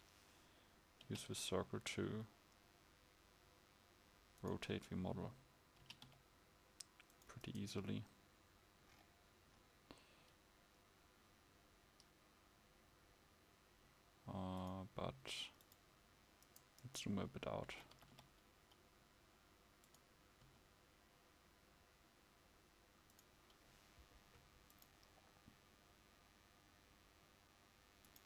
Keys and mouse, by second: 1.0 r, 6.3 r, 18.5 click, 18.5 g, 20.5 g.